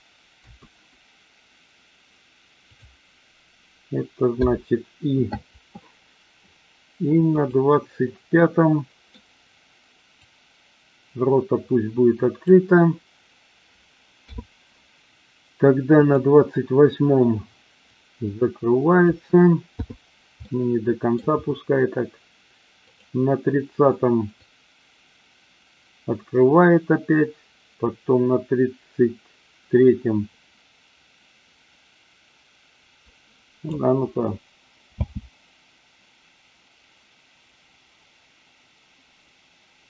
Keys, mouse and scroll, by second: 0.3 a, 2.7 click, 7.3 click, 8.3-9.1 middle drag, 10.2-12.4 drag, 14.3 i, 15.9 click, 17.9-19.2 drag, 19.7 i, 20.4-21.2 middle drag, 22.8 click, 24.4-33.7 drag, 35.1 space.